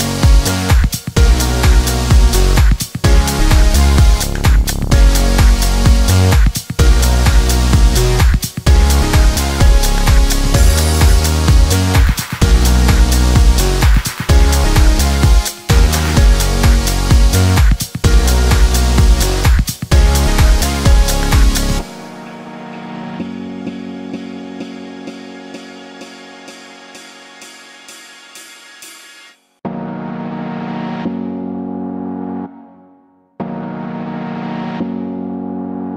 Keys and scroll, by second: 4.1 3, 4.3 Return, 11.5 1, 12.4 Return.